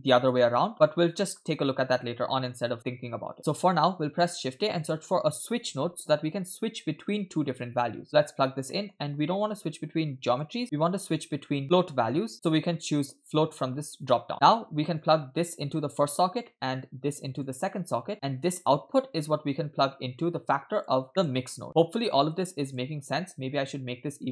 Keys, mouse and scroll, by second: 4.0 shift+a, 8.4-9.6 scroll up 3, 8.7 middle click, 9.6-10.3 scroll up 1, 10.3-14.2 drag, 14.3 middle click, 15.0 click, 15.2-16.3 drag, 16.5 middle click, 17.4-18.1 drag, 18.2 middle click, 19.2-20.9 drag, 21.1 middle click, 21.2 click, 21.7 middle click, 21.7 scroll down 2, 22.5 click, 23.7 click.